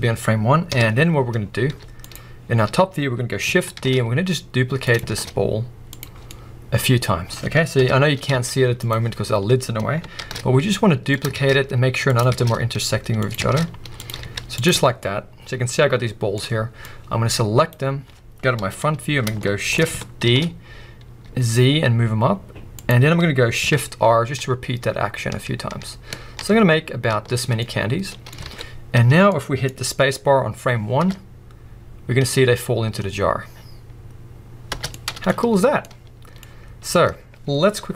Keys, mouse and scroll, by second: 0.6 KP_7, 1.4 scroll up 1, 1.6 z, 2.3-3.7 scroll up 1, 3.7 shift+d, 4.9 click, 5.1 shift+d, 6.0 click, 6.1 scroll down 1, 6.5-11.2 middle drag, 7.7 KP_7, 8.3 z, 9.3-10.2 scroll up 2, 10.2 shift+d, 11.2 click, 11.3 shift+d, 12.2 click, 12.3 shift+d, 13.3 click, 13.4 shift+d, 14.0 click, 14.2 z, 14.8 scroll down 2, 15.0-15.5 middle drag, 15.7-16.3 middle drag, 16.3-16.8 scroll up 1, 16.8 click, 18.6 KP_1, 19.4-23.0 shift+middle drag, 20.2 shift+d, 23.0-23.7 scroll down 2, 23.7-24.4 scroll down 1, 24.4 shift+r, 27.5 scroll down 2, 27.5-28.3 middle drag, 28.3 scroll up 3, 28.4 alt+a, 29.0 a, 29.3 middle click, 30.9 space, 34.7 space, 35.2 middle click, 35.2-35.8 scroll up 1, 35.9-36.4 middle drag, 36.4-37.9 scroll down 1.